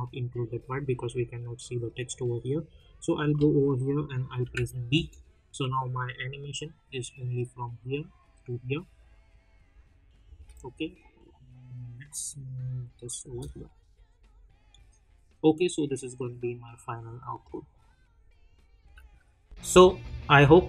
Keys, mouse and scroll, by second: 4.4 b, 4.9 space, 10.2 space, 12.6 click, 13.6 space, 18.8 space.